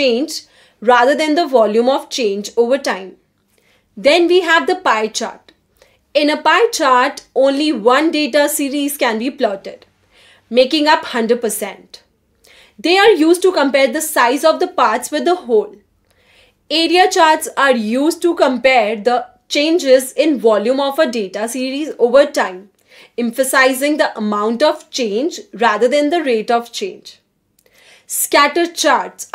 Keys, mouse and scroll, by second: 0.0-0.5 typing, 0.5 click, 6.3 middle click, 6.7 middle click, 6.9 middle click, 7.2 middle click, 8.0-9.0 scroll up 3, 9.6-10.1 scroll up 2, 10.1-11.4 typing, 11.5 click, 14.4 click, 15.0-15.4 drag, 15.8 click, 16.1 click, 16.3 drag, 16.6 click, 16.8 scroll down 1, 16.9-17.2 scroll up 1, 17.2 scroll down 1, 17.3-17.8 scroll up 1, 17.8 scroll down 1, 18.4 click, 19.5 click, 20.0 click, 20.2 click, 20.6 click, 20.9-23.9 typing, 22.7 click, 23.7 click.